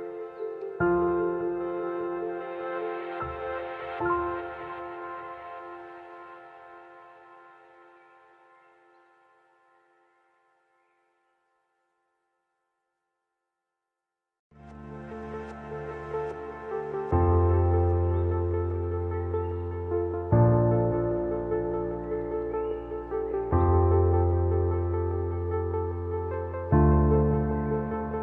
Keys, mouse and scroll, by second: 0.4 scroll down 1, 0.9 alt+scroll up 1, 1.8 click, 2.4 t, 2.7-14.6 drag, 15.1 scroll down 1, 16.3-20.9 drag, 23.1 alt+scroll down 1, 24.2 space, 24.3 click, 24.7 space, 25.6 t, 25.9-28.2 drag.